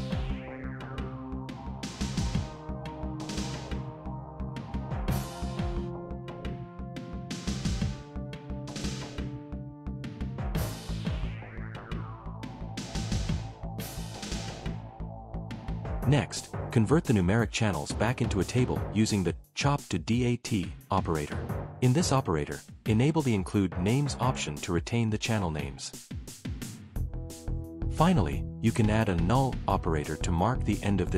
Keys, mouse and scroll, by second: 1.5 click, 2.3 click, 2.9 space, 3.7 shift+=, 4.1 space, 5.0 ctrl+v, 5.7 BackSpace, 6.8-8.0 typing, 8.9 Return, 11.1 Return, 11.6 click, 12.2 click, 17.3 right click, 18.2 right click, 19.1 click, 20.9 click.